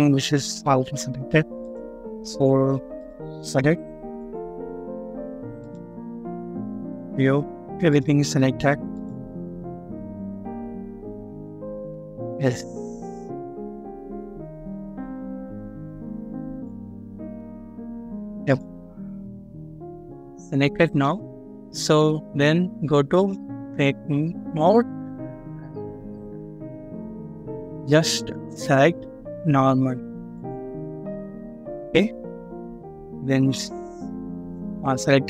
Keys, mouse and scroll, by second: 2.2 scroll down 1, 5.8-6.5 scroll up 1, 10.3 double click, 11.6 scroll up 1, 12.5 double click, 13.3-14.0 scroll down 1, 14.3 double click, 15.0-16.1 scroll down 1, 16.1 double click, 16.8 scroll down 1, 17.4-18.3 scroll up 1, 19.0 scroll down 1, 20.2 middle click, 24.2 scroll down 1, 26.1-26.5 scroll up 1, 26.5 scroll down 1.